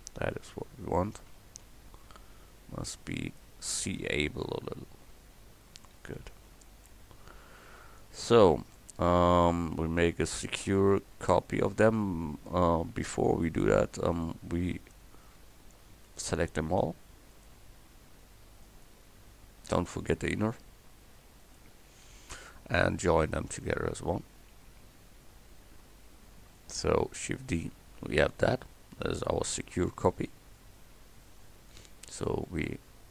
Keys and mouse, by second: 1.3 s, 5.1 Tab, 5.8 Tab, 6.2 a, 14.1-23.8 drag, 26.4 shift+d, 31.7-33.1 drag.